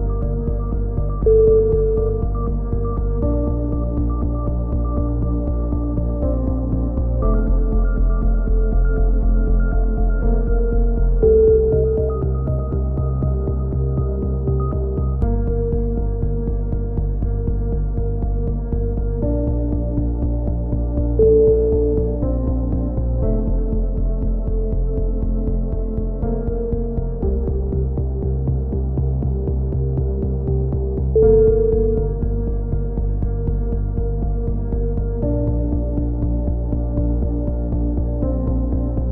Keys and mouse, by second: 3.8 right click, 4.9 click, 10.4-11.4 right drag, 12.6-13.9 right drag, 13.7 click, 14.0 right click, 14.5 click, 16.0 a, 16.5 right click, 17.4 middle click, 18.6 right click, 19.5 click, 23.6 a, 23.9-26.6 middle drag, 26.6-27.7 right drag, 27.7 middle click, 27.9 click, 29.1 a, 29.4-30.4 middle drag, 30.4-32.9 right drag, 31.4 f, 32.8 f, 33.4 a, 33.8 z, 35.5-38.0 drag, 38.3 click, 38.6 z, 39.0-39.1 middle drag.